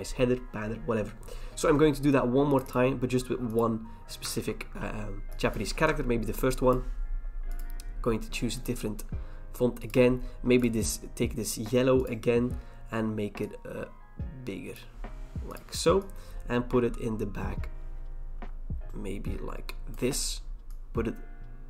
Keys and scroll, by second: 4.3 ctrl+v, 5.8 BackSpace.